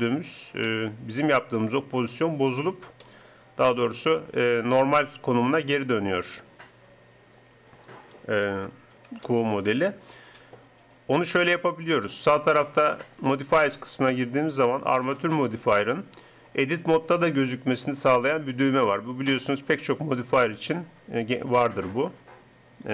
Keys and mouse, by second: 2.4 Tab, 7.5 d, 8.5 d, 9.3 d, 13.1-15.1 drag.